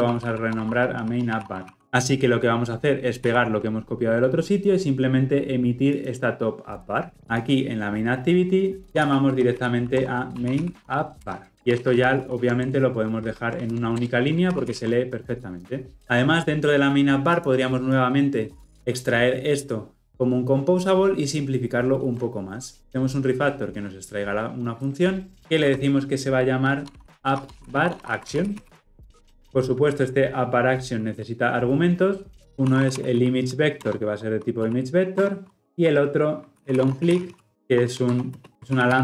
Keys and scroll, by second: 3.4 ctrl+v, 11.3 Return, 14.4 ctrl+alt+l, 14.6 ctrl+alt+o, 24.9 ctrl+alt+m.